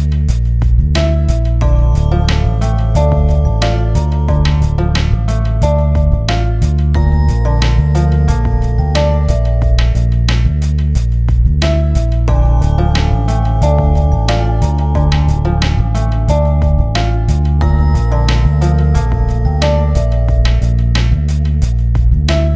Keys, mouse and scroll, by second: 1.1 click, 1.9-5.0 drag, 5.8-6.6 typing, 10.0-10.8 typing, 10.3 scroll up 1, 12.1 click, 13.0 scroll up 1, 14.5 scroll down 1, 15.8-18.8 drag, 18.8 alt+b, 20.1 Return, 21.3 scroll up 1.